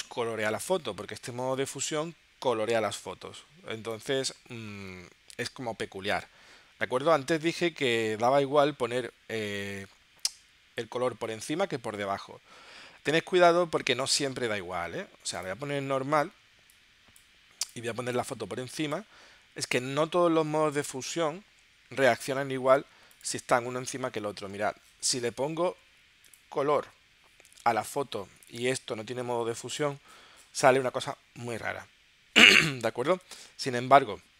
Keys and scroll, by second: 33.5 super+z.